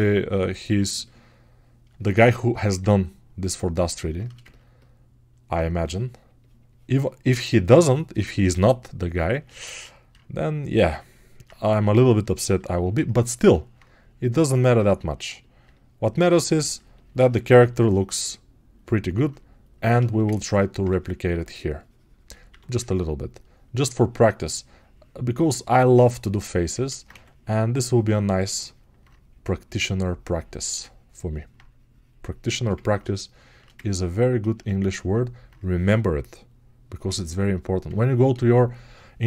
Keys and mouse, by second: 0.7 alt+click, 8.4-15.5 ctrl+right drag, 15.5-19.7 alt+drag, 19.7-31.2 alt+shift+right drag.